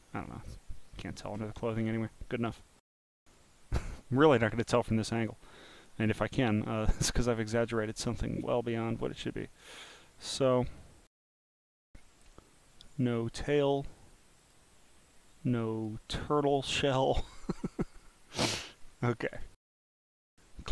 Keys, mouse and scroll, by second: 1.0 click, 3.4 click, 4.7 click, 5.4 scroll down 2, 5.5 scroll up 3, 5.8 click, 7.3 click, 8.0 click, 9.1 click, 10.2 scroll down 3, 14.0 click, 14.4 click, 15.7 click, 16.2 click, 17.4 click, 18.0 click, 18.8-19.1 scroll down 1, 19.2 click, 20.1 click.